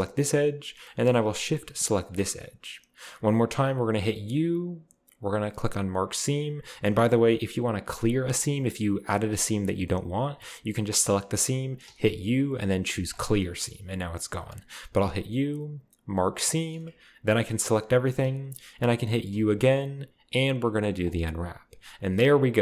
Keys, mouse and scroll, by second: 0.0 right click, 0.2 right click, 2.2 shift+right click, 4.3 u, 6.0-10.5 drag, 11.9 u, 13.1-14.2 drag, 13.6 middle click, 13.6-14.2 scroll up 2, 14.2-14.6 scroll up 1, 15.0 u, 16.3 click, 17.3 a, 17.5 a, 19.3 u, 21.1 click, 21.8-22.4 scroll down 1, 22.4-22.6 scroll up 1.